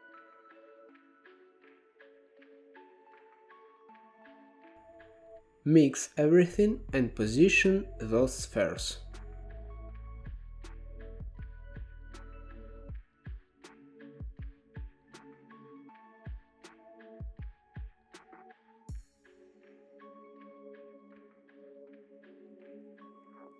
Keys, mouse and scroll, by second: 0.0-1.2 middle drag, 1.2-2.6 drag, 2.6 g, 3.2 middle click, 3.5-3.8 scroll up 1, 3.8-4.3 drag, 4.3-6.0 middle drag, 6.1-6.7 middle drag, 6.7 shift+a, 9.9-10.5 middle drag, 10.5 click, 11.6-14.4 drag, 14.4 scroll down 7, 14.7-15.2 middle drag, 15.2 click, 15.5 g, 17.1-18.0 middle drag, 18.0 click, 19.6 shift+a, 21.0 shift+a, 22.5 click, 22.9 g.